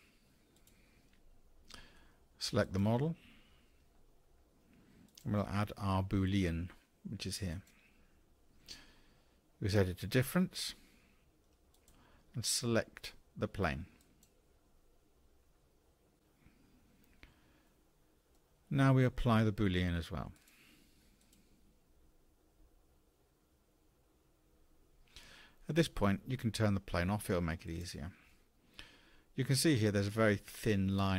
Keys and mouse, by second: 2.6 click, 11.7 click, 17.7-18.3 drag, 20.4-24.5 drag, 27.7 click, 28.3 click, 28.5 Tab, 29.4-31.1 drag.